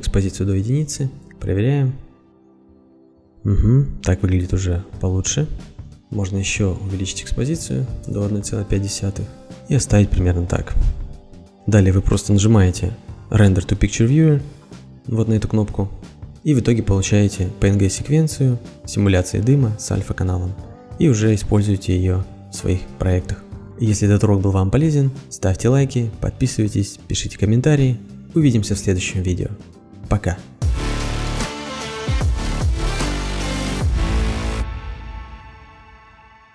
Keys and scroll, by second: 0.6 Return, 1.6 ctrl+r, 6.0 ctrl+r, 8.2 End, 8.4 ., 8.7 5, 8.8 Return.